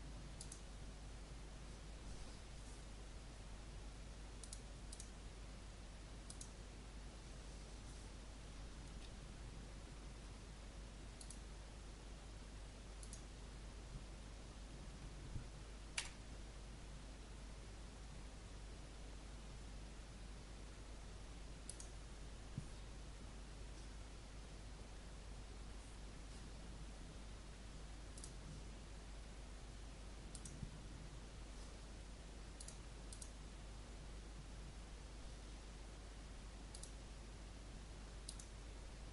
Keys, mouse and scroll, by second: 15.9 g, 21.6-39.1 drag.